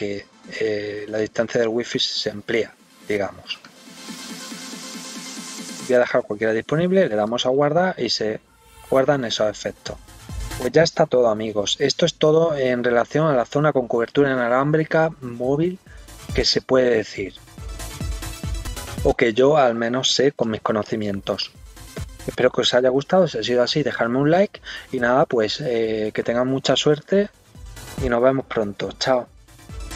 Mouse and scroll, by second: 3.6 click, 4.5 click, 5.2 click, 7.2 click, 9.8-10.5 scroll up 4, 11.9 scroll down 3.